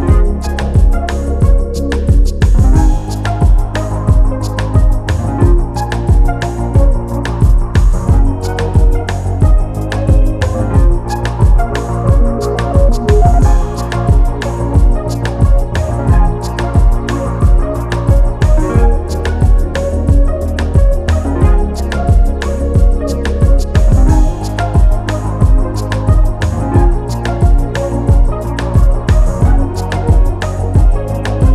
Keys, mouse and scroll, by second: 0.2 middle click, 0.5-1.0 scroll up 1, 1.0 middle click, 1.9-4.5 drag, 4.5 middle click, 5.1 click, 5.5 scroll down 2, 5.7 middle click, 6.2-8.3 drag, 11.0-13.1 drag, 15.4 click, 15.7-17.0 drag, 17.0 scroll down 2, 17.2-18.3 middle drag, 18.3-20.2 drag, 20.5 middle click, 21.0-21.5 scroll up 1, 21.5 middle click, 22.2 click, 22.6 scroll down 2, 22.7 middle click, 23.4-25.3 drag, 25.3 middle click, 25.6-25.9 scroll up 3, 25.9 middle click, 26.3-27.1 scroll down 3, 27.1-28.2 drag, 28.4-30.6 drag, 31.2-31.5 middle drag.